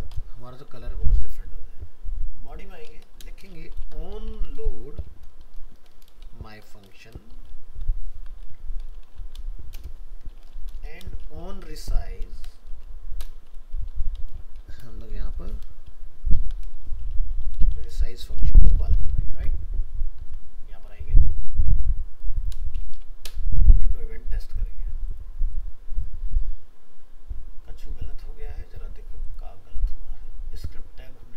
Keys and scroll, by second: 0.9 ctrl+s, 19.3 ctrl+s, 20.2 alt+Tab.